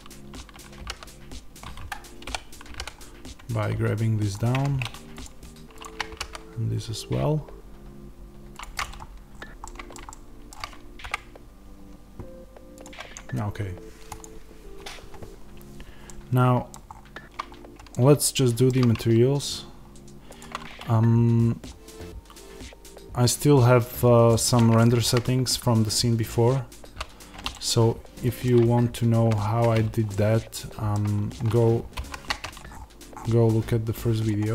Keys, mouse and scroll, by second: 0.7 g, 1.8 Escape, 2.2 o, 4.3 click, 4.5 Tab, 5.2 click, 5.7 shift+click, 6.0 g, 8.5 click, 8.7 click, 8.9-9.5 scroll down 2, 9.5-21.3 middle drag, 10.9 KP_0, 16.8-17.4 scroll up 2, 17.4-17.8 scroll up 1, 21.3-24.2 scroll down 2, 24.2-27.0 middle drag, 25.1 z, 27.1-29.2 middle drag, 27.1 z, 29.2 z, 30.0 middle click, 31.9 shift+c, 32.6-33.0 scroll up 1, 34.2 click.